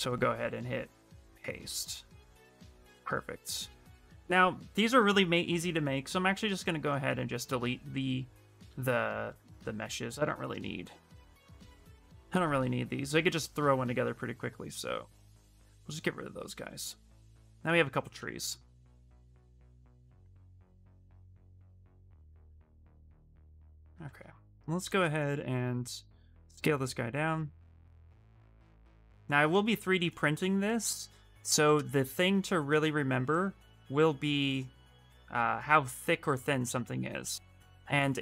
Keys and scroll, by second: 8.4 shift+f, 8.8 shift+f, 9.0 shift+f, 9.2 shift+f, 23.7 w.